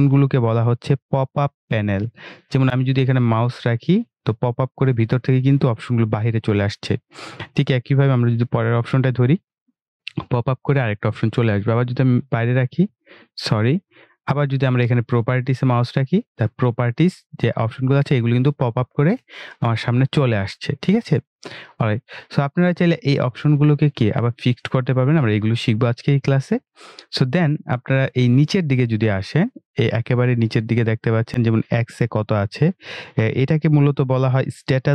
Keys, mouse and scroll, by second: 13.1 click.